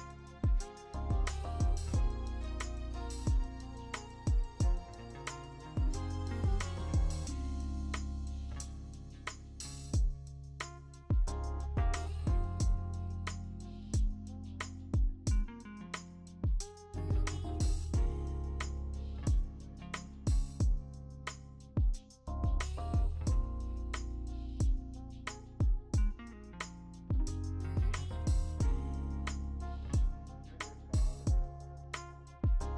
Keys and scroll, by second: 0.2 x, 0.8 ctrl+z, 2.4 w, 3.6-4.6 typing, 5.1 ctrl+shift+i, 11.5 scroll, 12.0 w, 14.3 b, 14.9 b, 15.7 ctrl+shift+i, 16.4 ctrl+z, 16.4 x, 17.1 ctrl+z, 17.9 ctrl+z, 18.1 ctrl+d, 18.4 m, 19.6 alt+BackSpace, 19.6 ctrl+d, 20.2 ctrl+d, 21.9 b, 22.1 ctrl+z, 23.1 w, 23.6 Caps_Lock, 23.9 w, 24.2 Caps_Lock, 24.3 w, 26.3 b, 28.5 ctrl+z, 28.9 x, 29.6 1, 30.9 x, 32.1 x.